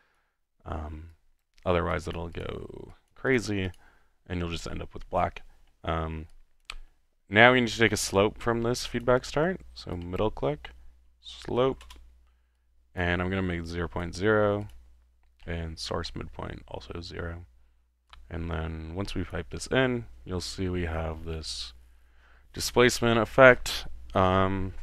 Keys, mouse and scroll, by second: 0.2 click, 0.7 middle click, 1.1-2.0 scroll up 2, 2.0-2.6 drag, 2.9 click, 3.4 click, 3.8 click, 5.0 typing, 6.3-7.2 drag, 8.0 middle click, 9.0-9.6 drag, 10.0 click, 10.1-12.3 typing, 13.0 click, 14.0 click, 14.6 click, 15.4-15.8 middle drag, 18.1-19.9 drag.